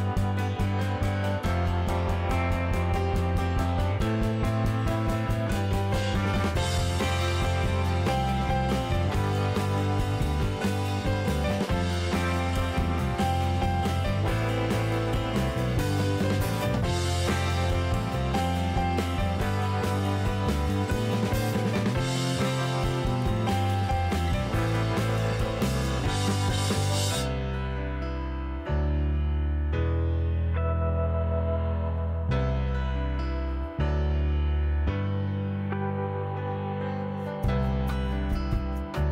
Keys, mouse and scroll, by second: 0.2 super+c, 0.3 super+v, 0.8 click, 3.1 click, 4.0 super+c, 4.2 super+v, 5.0 click, 9.4 click, 9.9 click, 10.9 click, 11.6 s, 13.8-14.2 drag, 14.4 click, 14.9 click, 16.1 click, 16.9 click, 18.2-18.5 drag, 18.7 click, 19.3 click, 20.9 click, 23.4 s, 26.7-28.1 drag, 29.8 super+c, 30.5 super+v, 31.2 click, 32.3 s, 34.7-35.1 drag, 35.4 click, 37.9 KP_7, 38.6-39.1 scroll up 2.